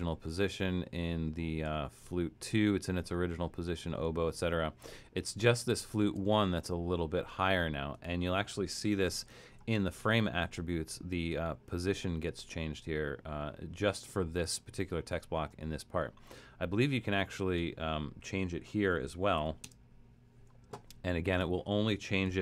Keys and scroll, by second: 1.8 alt+super+., 3.0 alt+super+., 4.0 alt+super+., 4.4 alt+super+,, 4.8 alt+super+,, 5.4 alt+super+,, 9.2 shift+Return, 18.4-19.9 typing.